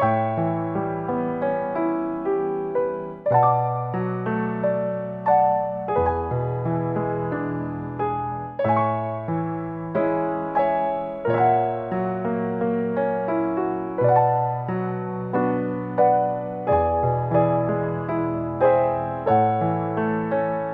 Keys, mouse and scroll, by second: 8.4 click, 8.9 ctrl+shift+t, 14.4-15.9 scroll down 11, 15.9 click, 16.2 click, 16.7 click, 17.9 scroll up 8, 18.5 middle click, 18.8 scroll up 2.